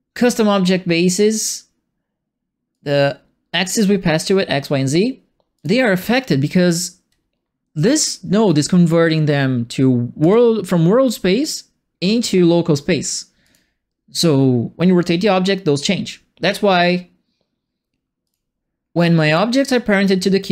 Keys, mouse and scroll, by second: 2.7-3.7 drag, 5.5 click, 8.4 right click, 10.2 click, 13.4 click, 18.2 click, 19.2 click.